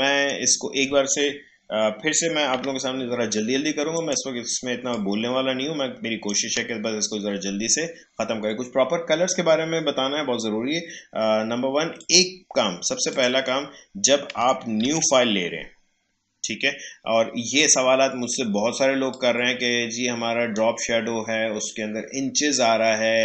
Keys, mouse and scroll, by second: 2.5 Delete, 3.9-8.8 drag, 12.0 click, 14.8 ctrl+n, 19.1-23.0 drag.